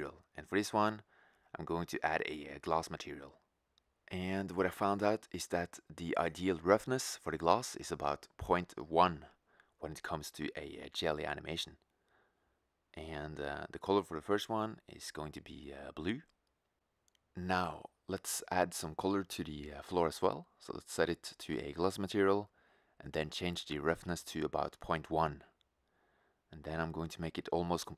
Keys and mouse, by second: 22.8 click, 25.9-27.5 drag.